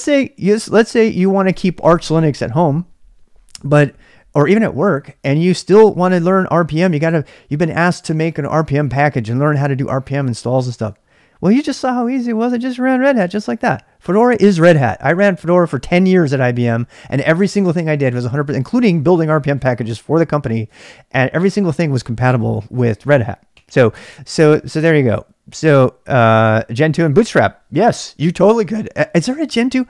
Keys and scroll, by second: 0.0-0.6 typing, 24.7-25.6 typing.